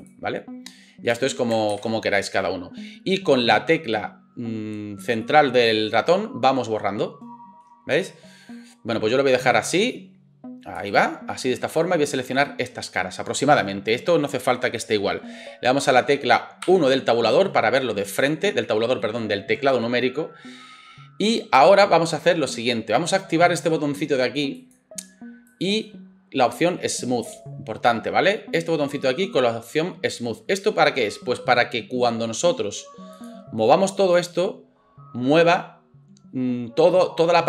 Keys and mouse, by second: 16.6 KP_1, 24.7 middle click, 25.5-37.4 drag.